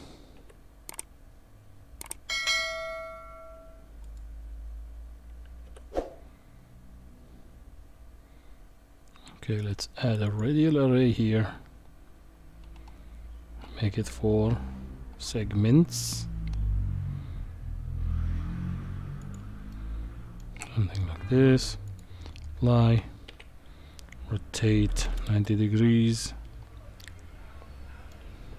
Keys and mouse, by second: 5.7 q, 19.7-20.4 middle drag, 21.9 click, 23.3 r, 27.0-28.1 middle drag.